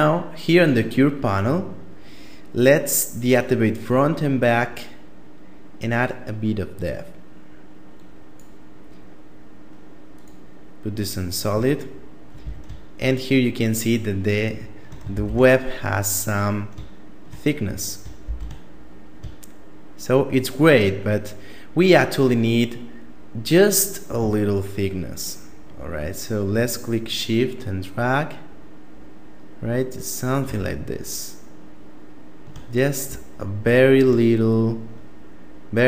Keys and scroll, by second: 11.8 a, 14.4 shift+space, 17.6 shift+space.